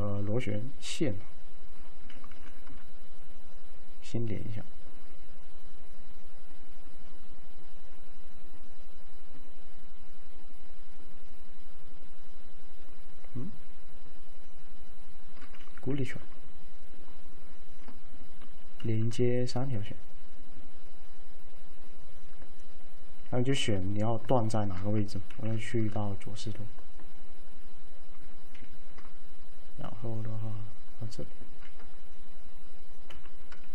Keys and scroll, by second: 2.4 v, 16.0 c, 18.9 alt+v, 25.4 l, 28.8 ctrl+x, 31.6 ctrl+x, 33.2 F3.